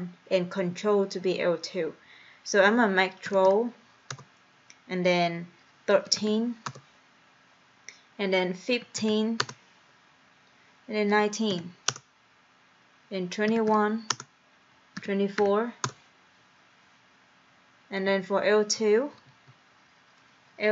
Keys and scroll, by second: 3.1-4.0 typing, 4.2 Return, 5.8-6.7 typing, 9.1 5, 9.5 Return, 11.2 1, 11.5 9, 12.4 Return, 13.3-15.4 typing, 15.9 Return, 19.4 Right.